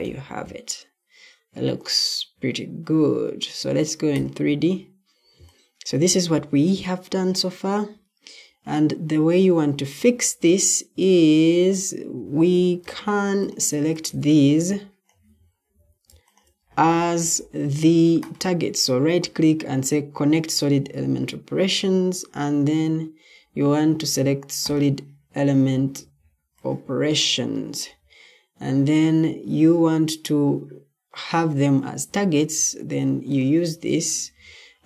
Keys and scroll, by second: 0.0-0.1 typing, 12.2 Escape, 15.5 Escape, 32.6 Escape.